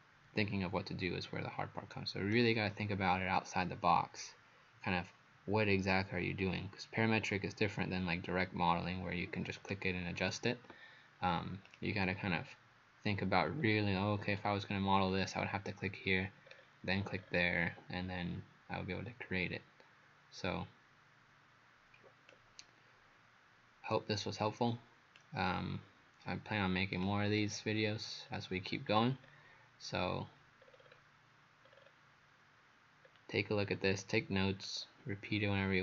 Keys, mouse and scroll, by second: 11.7 right click, 11.7 click, 12.3-12.7 scroll down 4, 13.6 scroll down 2, 14.3 scroll down 1, 15.1 scroll up 3, 16.5 scroll down 2, 17.2 scroll down 1, 22.3 click, 27.4 scroll down 2, 28.3-28.9 scroll down 2, 28.9-29.7 scroll up 5, 30.6-31.1 scroll down 5, 31.7-32.8 scroll up 4, 33.1-33.7 scroll down 1, 33.7-34.7 scroll up 3, 34.7 click.